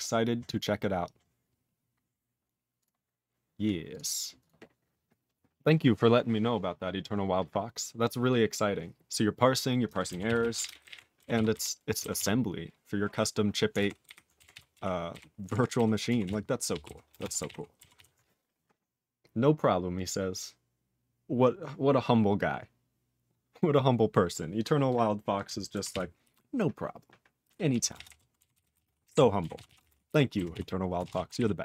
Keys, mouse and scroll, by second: 3.9 click, 3.9 click, 4.4 click, 4.4 click, 10.2 ctrl+s, 10.4 ctrl+a, 10.6 ctrl+e, 10.7 ctrl+n, 10.8 ctrl+g, 10.9 ctrl+e, 11.3 ctrl+s, 11.5 ctrl+b, 12.1 ctrl+s, 13.8 ctrl+alt+f, 14.0 ctrl+alt+b, 14.5 ctrl+s, 14.7 ctrl+e, 15.1 ctrl+b, 15.5 ctrl+alt+f, 15.7 ctrl+alt+b, 16.2 ctrl+s, 16.7 ctrl+p, 16.8 ctrl+e, 17.1 ctrl+space, 17.1 ctrl+a, 17.4 ctrl+g, 17.4 ctrl+e, 17.9 ctrl+s, 25.9 ctrl+s, 27.7 ctrl+a, 27.9 ctrl+space, 27.9 ctrl+e, 28.0 ctrl+g, 28.5 ctrl+s, 28.6 ctrl+n, 28.7 ctrl+space, 28.8 ctrl+a, 28.8 ctrl+p, 29.0 ctrl+g, 29.1 ctrl+e, 29.5 ctrl+s, 29.6 ctrl+a, 29.8 ctrl+space, 29.8 ctrl+e, 29.9 ctrl+n, 30.1 ctrl+g, 30.5 ctrl+s, 31.0 ctrl+space, 31.0 ctrl+a, 31.0 ctrl+p, 31.2 ctrl+g, 31.3 ctrl+n.